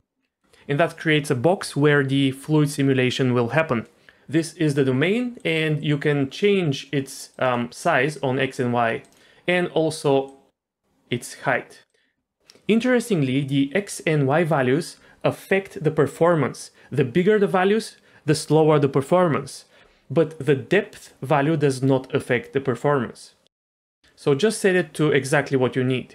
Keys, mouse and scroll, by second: 0.2 scroll down 2, 5.4-7.4 drag, 7.8-9.1 drag, 10.2-11.9 drag, 20.4-24.0 drag, 24.2-26.1 drag.